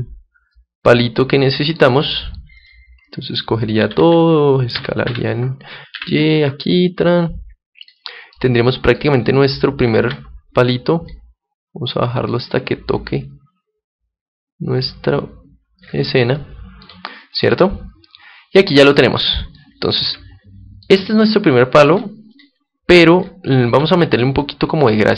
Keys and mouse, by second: 1.3-3.0 middle drag, 2.5-4.8 right drag, 3.7 a, 3.9 a, 4.7 s, 7.9-9.9 drag, 8.2 middle click, 9.9 Tab, 9.9-11.0 middle drag, 11.0-15.7 drag, 16.3-19.1 middle drag, 19.5-23.1 middle drag, 22.3-24.3 drag, 23.6 Tab, 24.4-25.1 middle drag.